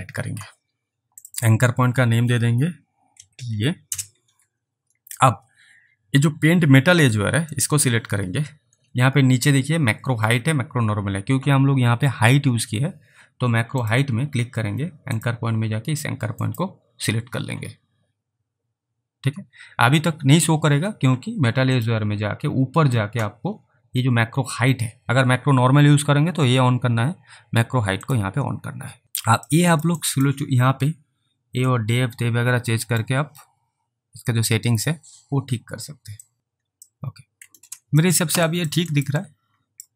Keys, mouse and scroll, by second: 1.4 double click, 3.2-3.5 typing, 3.9 Return, 7.6 click, 8.7-9.3 scroll down 3, 13.8 click, 16.5 click, 21.8 click, 22.5-23.0 scroll up 1, 28.1 click, 29.6 alt+click, 30.1 alt+right click, 31.7 click, 34.7 alt+click, 36.3 click, 36.9 alt+click, 38.5 alt+right click, 39.0 alt+right click, 39.3 alt+click.